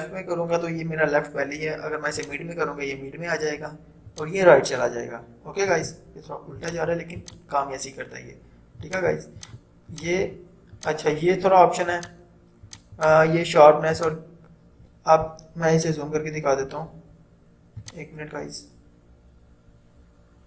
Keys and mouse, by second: 2.3 click, 6.6 click, 15.4 =, 16.9 typing, 17.8 click, 20.0 typing.